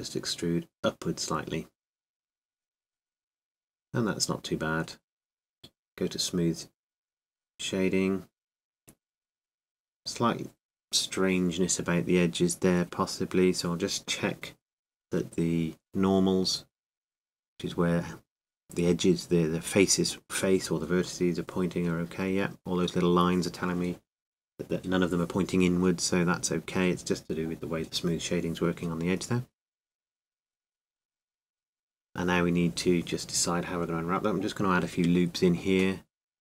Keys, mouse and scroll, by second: 3.3 Tab, 4.9 Tab, 6.3 t, 8.8 Tab, 9.8-11.8 drag, 11.2 Tab, 12.7-14.3 middle drag, 15.2 n, 18.0-19.6 drag, 19.4-21.1 middle drag, 21.1-25.2 drag, 25.4 click, 25.9-27.9 middle drag, 27.9 n, 29.5 Tab, 32.2 Tab, 33.3 ctrl+r.